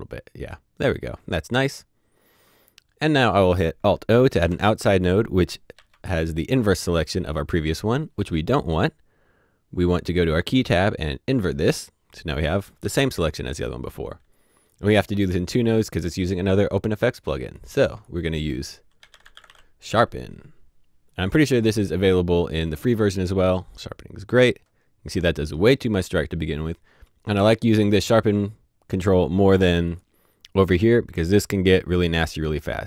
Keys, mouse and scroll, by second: 0.4-1.8 scroll down 1, 3.0 scroll down 1, 3.2 click, 4.4 typing, 5.7 typing, 8.7 click, 11.5 click, 12.8 h, 14.3 h, 14.5 click, 18.7-19.9 typing, 21.1 click, 27.5 click, 29.8 click, 31.8 click.